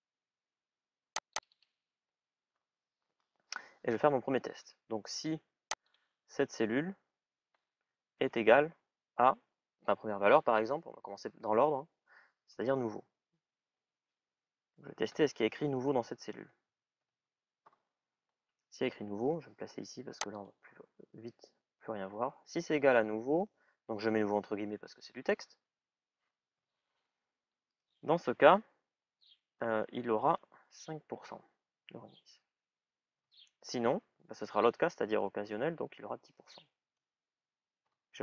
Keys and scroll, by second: 14.6-17.3 typing, 30.9 shift+(, 31.6 shift+ù, 36.1 shift+à, 36.5 shift+ù.